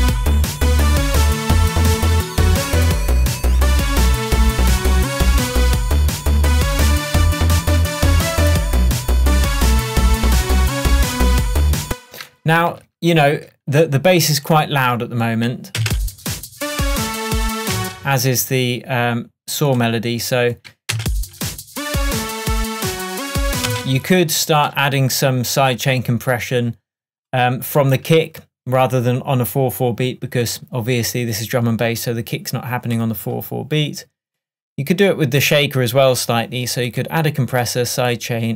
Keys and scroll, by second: 11.9 space, 12.7 super+space, 12.8 super+s, 15.9 space, 17.8 space, 21.0 space, 23.8 space.